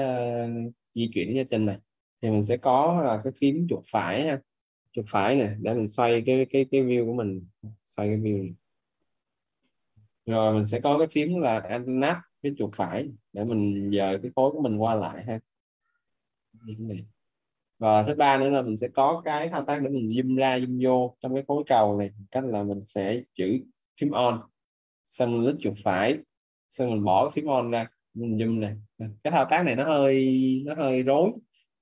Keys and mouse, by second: 4.9 right click, 12.5 right click, 22.6 right click, 25.6 right click.